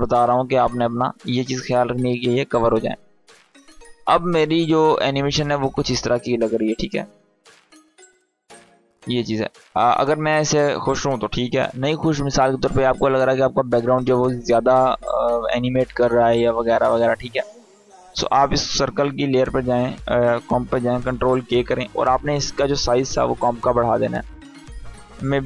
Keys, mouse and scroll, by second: 3.8-9.7 drag, 18.7 click, 21.0 ctrl+k, 22.5 click.